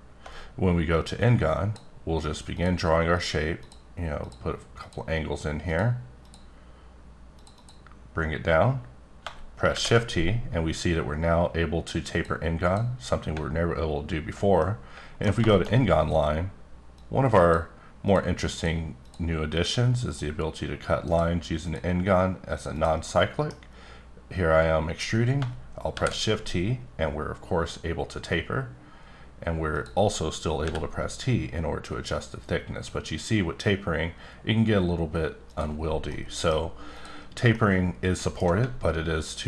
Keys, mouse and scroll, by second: 0.3-1.2 scroll up 1, 1.5 click, 2.5 click, 3.1 click, 3.6 click, 4.2 click, 4.8 click, 5.7 click, 6.2 click, 7.4 click, 7.5 double click, 9.7 shift+t, 12.1 click, 12.6 click, 14.0-14.6 alt+scroll up 2, 14.6 middle click, 15.5 middle click, 15.7 scroll up 2, 16.9 click, 18.1 click, 18.5 click, 19.0 click, 19.6 click, 20.1 click, 21.1 click, 21.6 click, 22.5 click, 22.7 double click, 23.1 middle click, 26.1 t, 29.7 click, 30.6 t, 35.5 click, 35.9 scroll down 1, 36.1 middle click, 36.9 click, 37.8 middle click, 38.9-39.4 alt+scroll up 1.